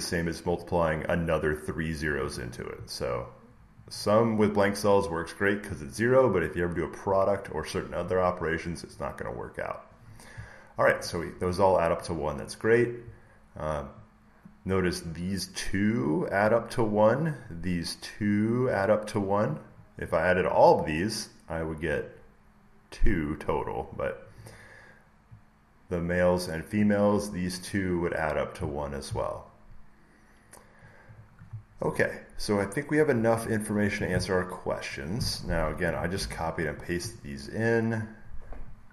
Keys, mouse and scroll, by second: 0.5 click, 1.4 click, 2.1 click, 3.8 click, 3.9 click, 10.9 click, 12.0 click, 14.9 click, 18.1 click, 20.0 click, 21.4 click, 24.6-26.4 drag, 26.6-28.7 drag, 31.1-33.1 drag, 35.1 click, 36.1 alt+Tab, 37.5 scroll, 38.6 click.